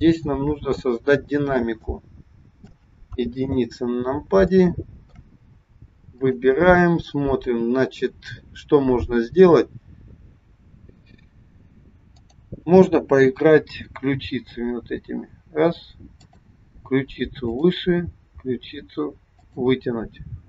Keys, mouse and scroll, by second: 1.7 shift+middle click, 3.1 KP_1, 3.7 scroll down 1, 4.4 shift+middle click, 6.1 click, 12.0 click, 14.3 g, 17.4 click, 18.4 g.